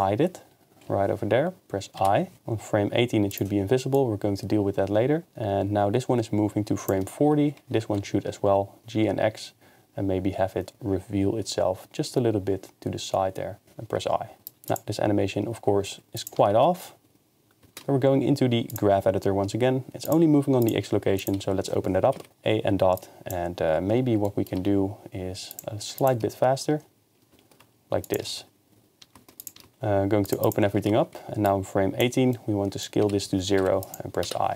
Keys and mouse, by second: 2.0 i, 3.3 click, 7.7 g, 8.0 x, 13.6 i, 14.5 click, 14.7 shift+space, 16.2 click, 17.8 ctrl+Tab, 18.7 click, 20.1 click, 20.6 click, 21.2 click, 22.0 a, 22.2 KP_Decimal, 23.0 drag, 24.7 g, 25.5-26.1 drag, 26.3 shift+space, 29.4 click, 29.7 ctrl+Tab, 30.3 click, 30.8 ctrl+Tab, 31.5 click, 33.0-34.5 typing.